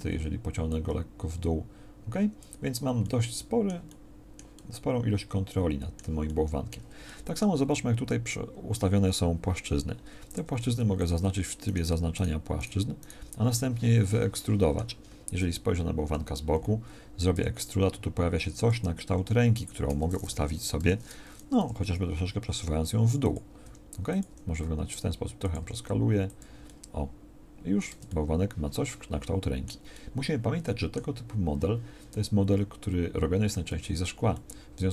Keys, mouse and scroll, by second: 10.3 ctrl+Tab, 15.6 KP_1, 16.0 KP_3, 17.3 e, 20.7 o, 21.5 g, 25.6 g, 27.9 Tab, 33.8 Tab.